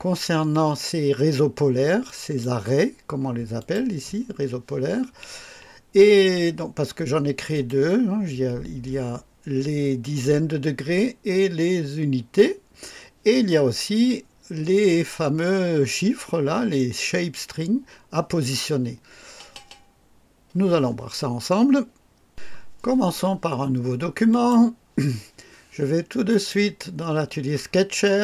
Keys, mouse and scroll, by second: 2.0 click, 3.6 click, 7.5 click, 24.3 click, 26.3 click, 28.0 click.